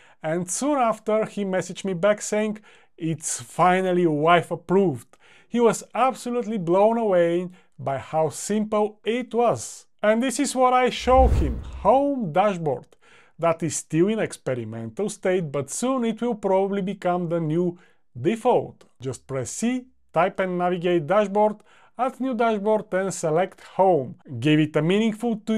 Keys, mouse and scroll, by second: 19.2-20.8 typing.